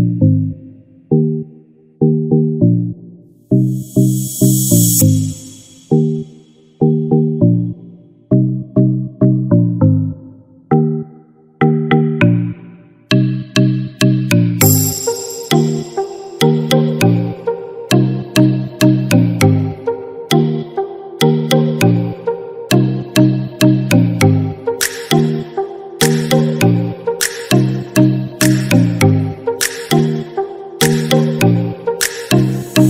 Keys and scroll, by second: 10.4 ctrl+-, 12.9 ctrl+=.